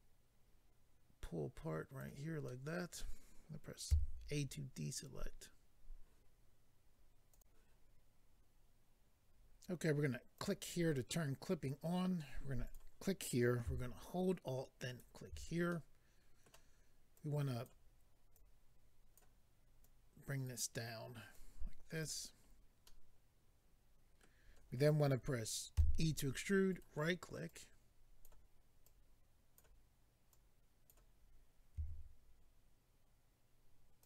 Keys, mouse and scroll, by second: 2.4 middle click, 3.9 a, 7.3 click, 7.4 click, 10.4 click, 12.6 click, 14.8 alt+click, 15.7 middle click, 17.1 click, 18.3 click, 19.8 click, 21.3 click, 22.3-22.8 scroll down 1, 22.8 middle click, 26.7 right click, 26.7 e, 27.4 click, 28.8 click, 30.3 click, 31.7 s, 34.0 click.